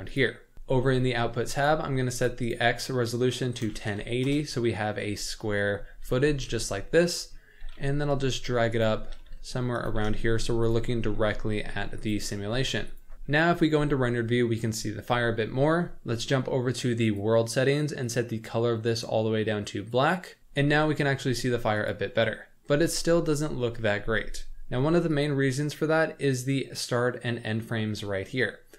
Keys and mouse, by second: 1.7 click, 2.6-4.3 drag, 6.0 g, 7.6 g, 9.1 g, 9.8 g, 11.0 g, 12.4 g, 13.4 z, 17.1 click, 18.0 click, 21.8 click, 25.2 click.